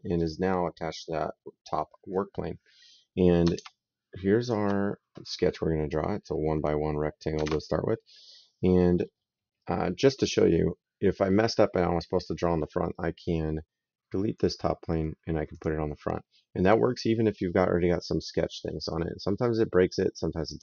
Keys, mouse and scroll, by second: 0.0 right click, 3.6 alt+Tab, 4.2 alt+click, 7.2 alt+Tab, 14.1 click, 15.3 click, 20.3 click.